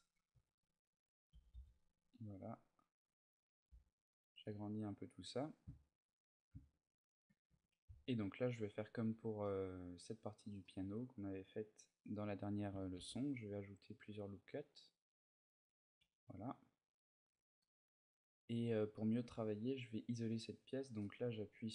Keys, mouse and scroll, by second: 0.1 z, 0.4 middle click, 1.1 g, 3.3 click, 3.5 a, 3.6 middle click, 4.2 Tab, 4.4 middle click, 5.5 shift+middle click, 6.7 ctrl+middle click, 7.3 Tab, 10.4 middle click, 11.0-11.6 scroll up 1, 12.8 ctrl+r, 15.4 click, 15.8 a, 16.4-16.9 scroll down 1, 17.0 Tab, 17.4 middle click, 18.3-19.3 scroll down 2, 18.7 middle click, 19.7-20.3 scroll up 2.